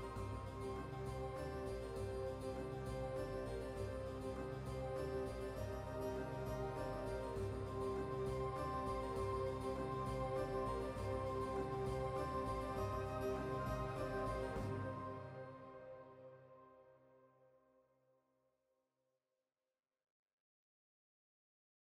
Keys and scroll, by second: 1.9 typing, 7.5 typing.